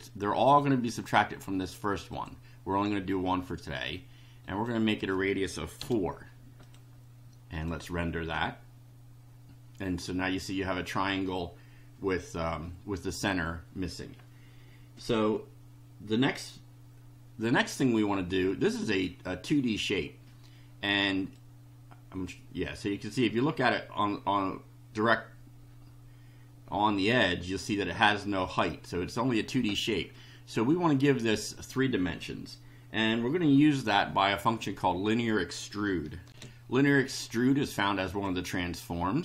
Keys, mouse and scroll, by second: 2.1 click, 4.4 click, 5.8 4, 6.7 click, 7.6 click, 21.3-28.7 drag, 36.3 ctrl+r, 38.1 click.